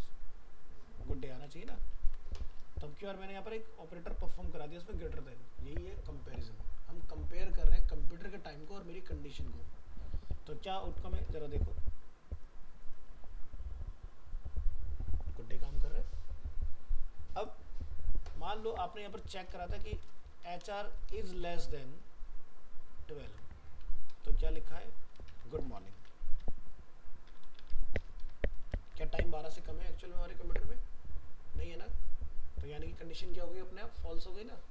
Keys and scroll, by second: 1.9 ctrl+s, 23.2 ctrl+s, 25.3 ctrl+shift+Left, 28.7 ctrl+s.